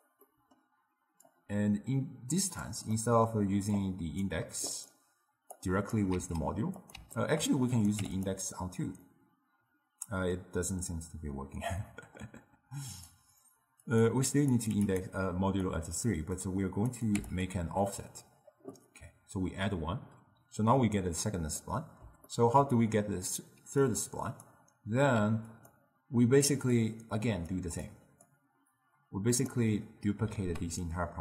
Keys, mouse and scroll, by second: 0.3-1.3 middle drag, 1.3 drag, 3.0 middle click, 3.8 click, 4.8 click, 5.6-6.2 drag, 6.2 shift+d, 7.2 ctrl+middle click, 7.8 click, 9.1-13.0 middle drag, 13.0-15.1 drag, 15.8-17.5 drag, 21.7-23.9 middle drag, 23.9 click, 25.6 click, 26.9 click, 28.0 click, 28.8-30.4 drag, 30.4 ctrl+shift+d.